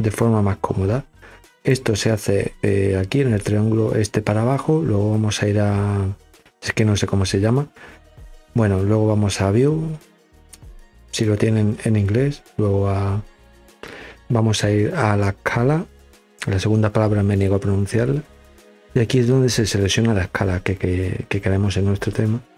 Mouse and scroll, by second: 1.5 click.